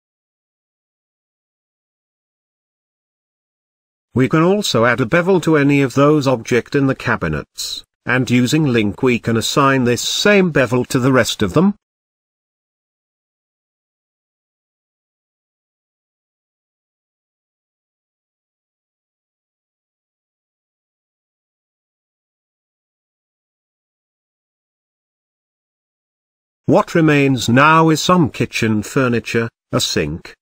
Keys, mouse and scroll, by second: 0.5-2.0 shift+middle drag, 2.0-2.5 scroll up 8, 2.5-4.5 shift+middle drag, 4.5 click, 4.9-6.7 drag, 6.9 middle click, 7.5-8.3 scroll up 2, 10.4 click, 10.8 z, 12.7-13.6 scroll down 2, 13.7 click, 15.8 shift+l, 17.1 ctrl+click, 17.6 shift+click, 18.5 ctrl+l, 20.6-21.3 scroll up 1, 21.3-22.0 scroll down 9, 22.1-22.5 middle drag, 22.5-22.8 scroll down 2, 22.8 shift+middle drag, 23.0-23.8 scroll up 2, 23.8-25.6 shift+middle drag, 25.6 KP_0.